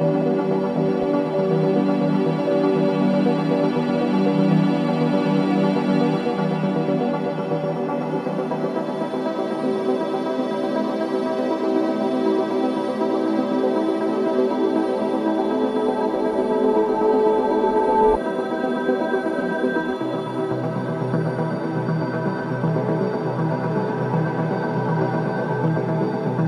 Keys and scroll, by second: 23.4 3.